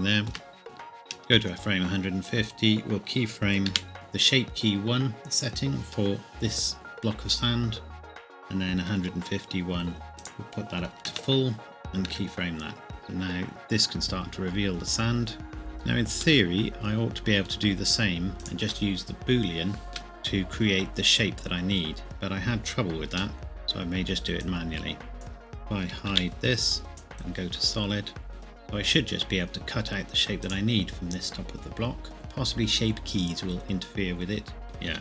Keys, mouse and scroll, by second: 1.4 Left, 3.7 i, 9.0 Right, 10.9 KP_1, 11.1 KP_Enter, 12.1 i, 12.9 click, 15.5 shift+middle click, 16.1-16.4 scroll up 1, 16.4 middle click, 18.4 click, 19.9 shift+middle click, 23.3 middle click, 24.4 click, 26.1 h, 26.9 click, 28.3 KP_1, 30.4 click, 34.6 Tab.